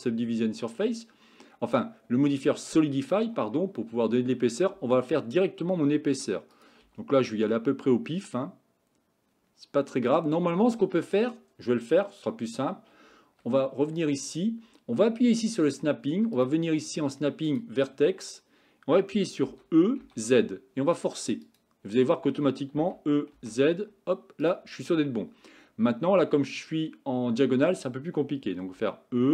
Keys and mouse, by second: 4.8 e, 6.9 e, 15.6 click, 16.4 click, 19.5 e, 22.8 e, 28.8 e.